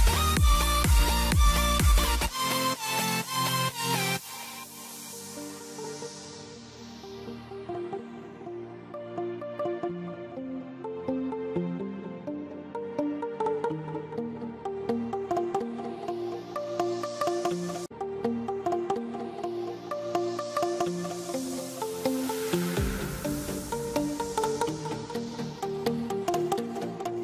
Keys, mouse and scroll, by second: 0.4 click, 2.3 ctrl+right click, 3.1 click, 3.6 shift+click, 4.5 c, 5.8 click, 7.5 ctrl+Page_Down, 8.5 click, 14.5 right click, 15.3 click, 16.2 c, 16.5 click, 18.4 click, 19.2 scroll up 1, 19.9 click, 20.6-21.2 typing, 21.8 scroll down 1, 22.4 click, 25.3 ctrl+right click, 26.4 shift+click.